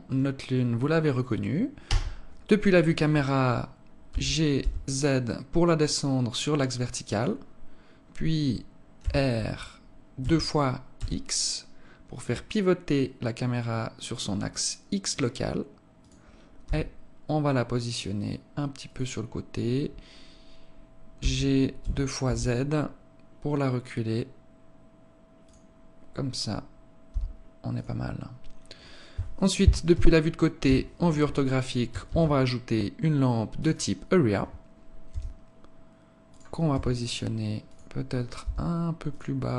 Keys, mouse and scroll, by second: 0.0 right click, 1.8 KP_0, 4.0 g, 8.8 r, 16.3 g, 20.8 g, 26.6 g, 29.4 KP_3, 30.1 KP_5, 31.5 shift+a, 34.6 g, 36.1 r, 37.8 g, 39.2 r.